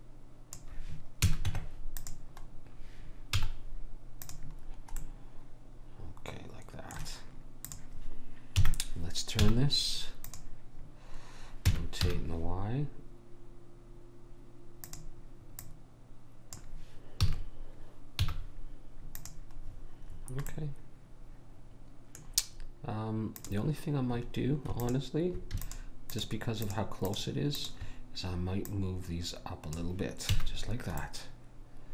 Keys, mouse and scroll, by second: 1.2 a, 1.5 Tab, 3.3 z, 7.7 click, 8.6 KP_1, 9.5 z, 11.7 r, 15.7 click, 17.2 a, 18.2 z, 19.9 middle click, 23.4-30.6 drag, 30.4 a, 30.6-31.9 middle drag.